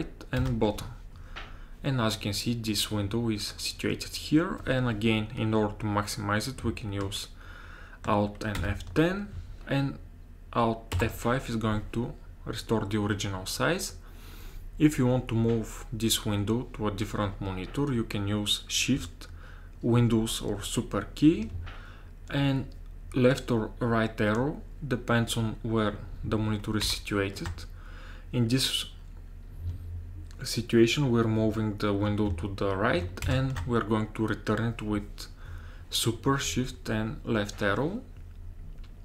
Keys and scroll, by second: 0.4 super+Down, 8.6 alt+F10, 11.0 alt+F5, 26.9 shift+super+Right, 33.3 shift+super+Left.